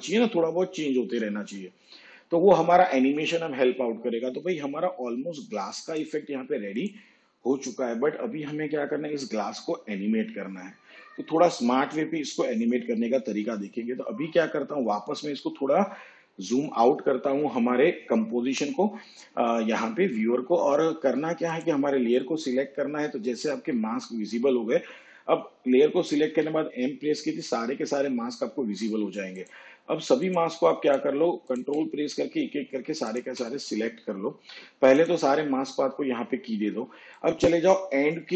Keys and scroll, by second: 26.4 m.